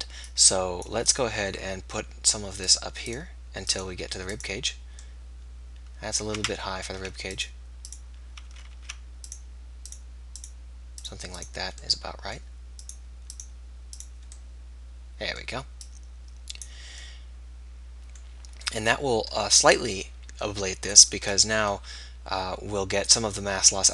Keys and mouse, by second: 1.8-6.4 drag, 6.4 ctrl+z, 7.0 ctrl+z, 7.0 middle click, 8.4 ctrl+z, 8.8 ctrl+z, 12.1-17.9 drag, 21.3 middle click, 21.9-23.9 drag, 21.9 r.